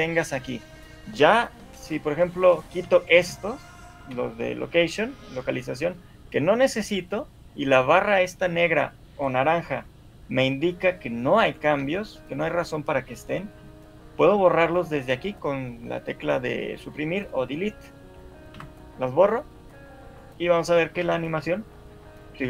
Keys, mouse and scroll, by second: 0.3 shift+click, 2.5 shift+click, 3.1 shift+click, 11.6 click, 12.4 shift+click, 20.8 Delete, 20.8 right click, 21.2 alt+a.